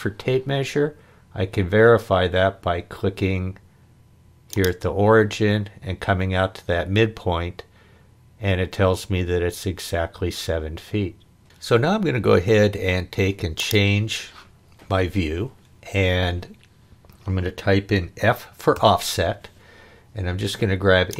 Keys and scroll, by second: 18.7 f.